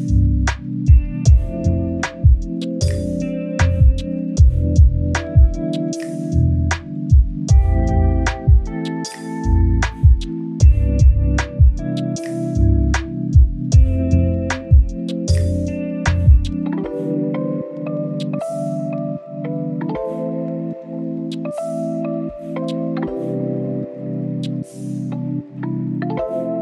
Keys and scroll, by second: 1.6 s, 3.1 ctrl+t, 4.1 ctrl+shift+t, 5.2 ctrl+j, 5.9 ctrl+alt+shift+j, 8.8-10.2 typing, 10.7 ctrl+a.